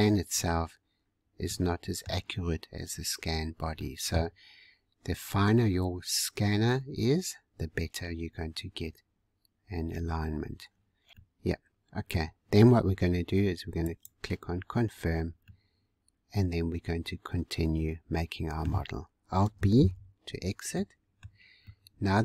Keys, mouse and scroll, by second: 1.4-2.9 middle drag, 2.9-3.6 scroll down 2, 3.6 scroll down 1, 3.8 middle click, 4.7-6.9 scroll up 1, 6.9-7.6 scroll up 1, 7.6-8.7 scroll down 2, 8.7-10.6 scroll down 1, 11.1 scroll down 2, 11.2-13.8 middle drag, 13.8-14.8 drag, 14.8-15.4 scroll down 3, 15.4-18.4 middle drag, 18.8 scroll down 2, 19.7 alt+b, 20.7-22.2 middle drag.